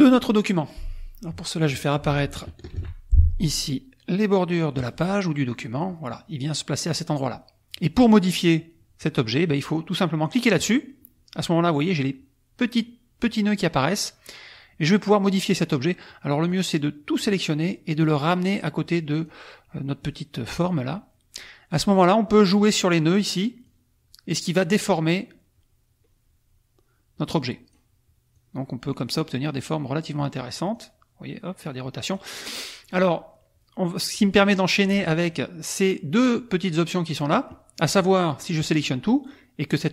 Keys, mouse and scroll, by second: 2.8 ctrl+shift+d, 4.8 click, 5.7 click, 10.5 click, 16.5 click, 18.0 click, 20.0 click, 22.4 click, 23.1 click, 23.7-27.9 drag, 28.3-30.3 drag, 30.7-32.3 drag, 34.1 click, 38.0 click.